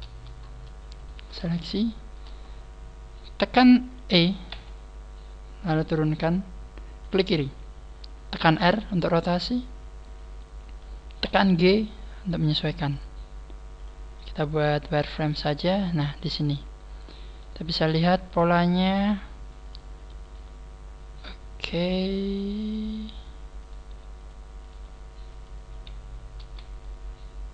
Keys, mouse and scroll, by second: 1.0 shift+right click, 1.0 scroll down 3, 1.5 shift+middle click, 4.5 e, 7.1 click, 8.4 click, 8.4 r, 9.6 click, 11.2 click, 11.2 g, 13.2 click, 13.7 click, 14.8 click, 16.8-17.3 scroll up 1, 17.3 right click, 17.4 g, 18.6 click, 18.8 right click, 19.0 g, 19.6 click, 20.2 right click, 20.2 g, 22.4 click, 23.4 g, 23.6 right click, 23.8 g, 24.2 click, 24.6 click, 24.6 right click, 24.7 g, 25.4 click, 25.8 scroll down 2, 26.3 z, 26.8 middle click.